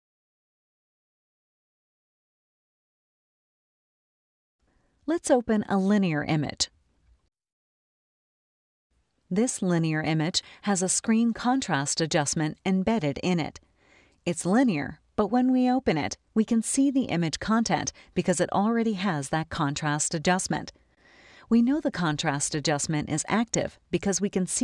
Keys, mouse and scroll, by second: 0.0-1.3 typing, 1.4 Return, 5.8 scroll up 2, 7.5 click, 9.1-11.6 scroll up 2.